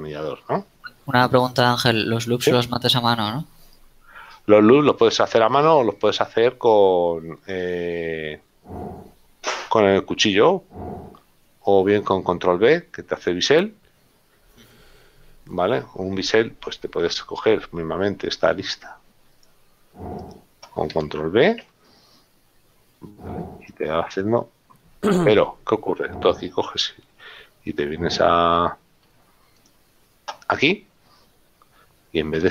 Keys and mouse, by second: 4.7 middle click, 20.1 click, 20.4 right click, 21.8 ctrl+b, 27.4 F6, 29.8 click.